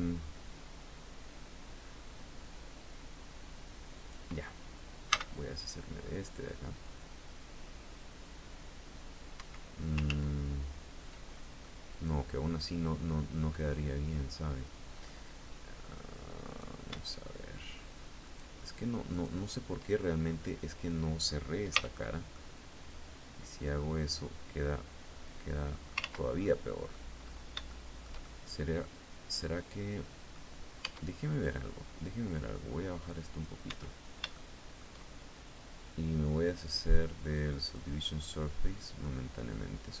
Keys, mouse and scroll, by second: 3.5 right click, 4.6 v, 8.9 Escape, 9.6 ctrl+z, 10.7-11.1 ctrl+scroll down 2, 11.2-14.7 middle drag, 16.0 right click, 16.5 shift+right click, 17.8 shift+right click, 18.7 shift+right click, 19.5-20.2 shift+scroll down 1, 21.3 f, 21.9-25.6 drag, 25.5 ctrl+z, 26.0 ctrl+click, 27.2 shift+middle click, 28.1-30.1 middle drag, 30.3 Tab, 31.9-33.1 drag, 33.2 Tab, 33.9 shift+middle click, 37.2 click, 38.2 scroll down 1, 38.5-40.0 middle drag.